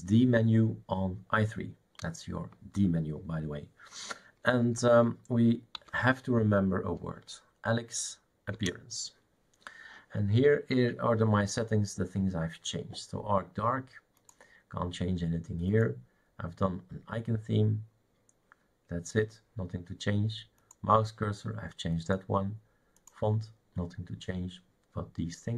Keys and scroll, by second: 5.5-6.5 typing, 8.6 Return.